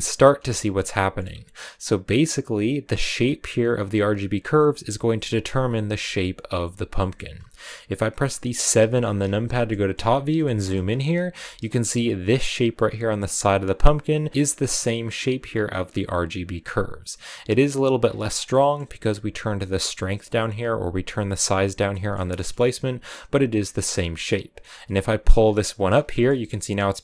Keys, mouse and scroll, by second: 0.4 shift+middle click, 1.1 scroll up 2, 1.6 click, 2.1-5.2 middle drag, 5.2 scroll down 2, 6.8-8.6 middle drag, 8.6 KP_7, 9.5 shift+middle click, 9.9-11.7 scroll up 10, 10.3 shift+middle click, 11.2 shift+middle click, 23.0 scroll up 1, 24.3-26.0 drag, 26.0-27.0 shift+middle drag.